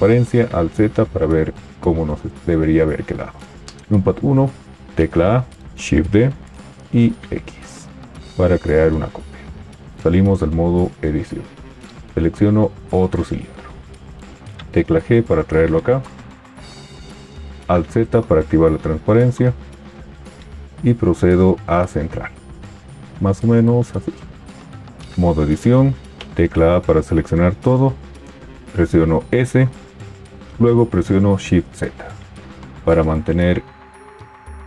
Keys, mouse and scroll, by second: 0.2 alt+z, 4.0 KP_1, 4.9 a, 5.8 shift+d, 10.4 Tab, 14.5 g, 17.5 alt+z, 24.7 Tab, 26.2 a, 28.9 s, 30.2 shift+z.